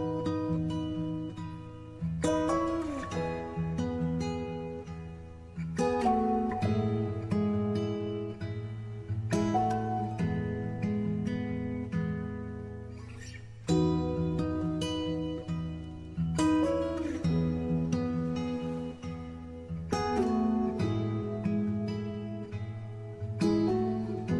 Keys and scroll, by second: 0.9 w, 13.9 w, 15.4 Tab, 15.9 w, 20.6 ctrl+q.